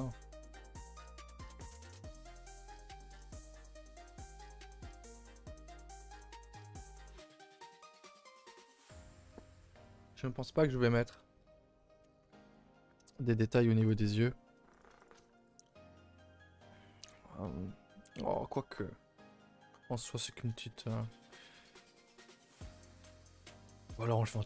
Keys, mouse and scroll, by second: 0.6 scroll down 1, 0.8-1.3 middle drag, 1.3 scroll down 1, 1.6-4.7 middle drag, 11.4 KP_0, 12.1-13.1 scroll down 5, 13.1-13.8 shift+middle drag, 13.8 click, 14.0 h, 14.3-14.8 scroll up 2, 14.8 click, 15.0 shift+click, 15.3 g, 17.0 g, 21.8 a, 21.9 a, 22.9 click, 23.2 shift+click, 23.4 g.